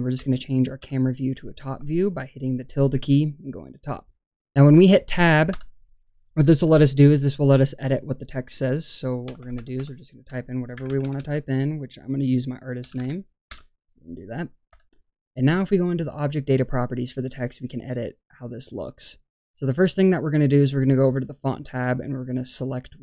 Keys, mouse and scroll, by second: 4.4 scroll up 1, 5.5 Tab, 9.2-11.1 typing, 12.7 shift+i, 12.8 shift+s, 12.9 shift+a, 13.4 shift+n, 14.6 Tab, 18.7 click, 19.2-20.2 middle drag, 21.0 click, 21.9 click.